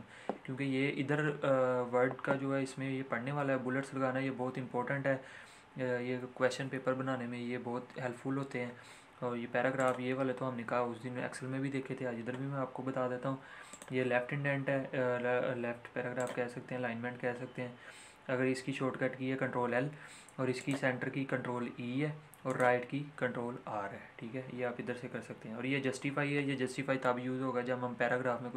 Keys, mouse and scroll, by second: 9.7 click, 13.6 click, 16.1 click.